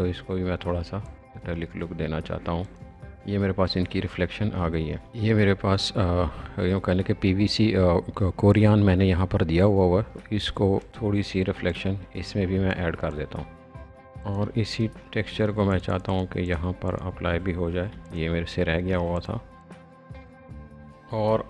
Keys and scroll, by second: 15.4 alt+space, 17.8 b, 20.5 space.